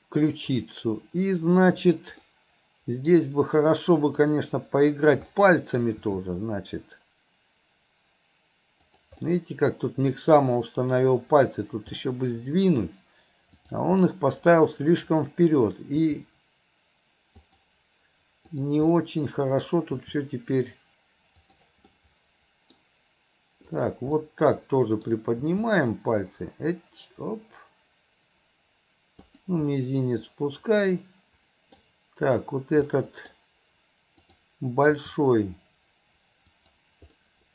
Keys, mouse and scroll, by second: 4.2 click, 5.4 middle click, 12.1-13.6 middle drag, 13.6 click, 14.1-15.1 middle drag, 18.5 click, 18.9 middle click, 23.7 click, 24.2-25.1 middle drag, 29.8-31.8 middle drag, 33.0 middle click, 34.3 click.